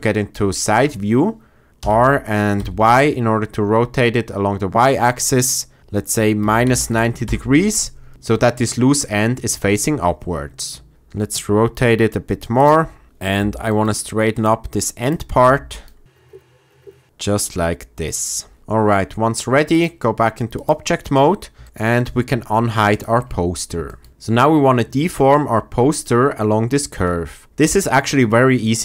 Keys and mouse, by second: 2.5 r, 2.5 y, 5.8 KP_Subtract, 6.3 KP_9, 6.6 KP_0, 7.2 Return, 10.9 r, 12.5 click, 13.4 g, 13.6 click, 14.3 click, 14.9 click, 15.4 g, 15.7 click, 16.1 click, 16.3 g, 16.8 g, 18.0 click, 19.8-20.6 drag, 21.5 shift+middle drag, 22.8 click, 23.8 shift+drag.